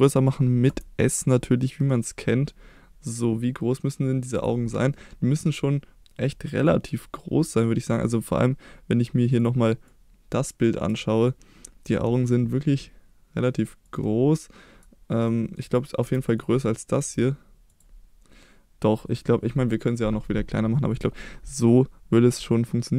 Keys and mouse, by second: 0.7 s, 4.3 click, 4.9-6.6 middle drag, 15.3 middle click, 16.0 KP_1, 17.0 s, 17.7 click, 20.9 click.